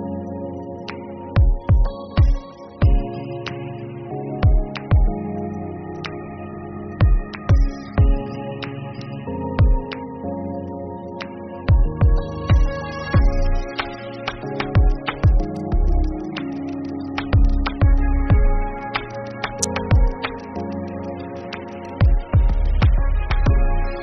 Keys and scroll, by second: 0.0-10.1 typing, 0.2 Tab, 3.0 Tab, 6.6 ctrl+s, 6.9 Up.